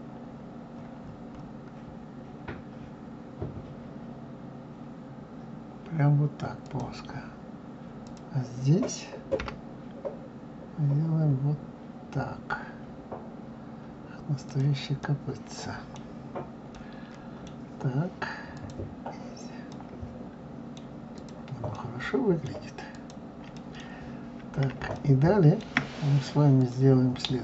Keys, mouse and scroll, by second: 8.0 click, 9.4 g, 15.0-16.1 middle drag, 16.1-16.7 scroll down 1, 16.7-18.5 middle drag, 18.5 click, 19.7-21.1 middle drag, 21.1 click, 21.7-22.9 middle drag, 22.9 click, 23.5 middle click, 24.1-25.0 scroll up 2, 25.0-26.6 shift+middle drag, 26.6 click.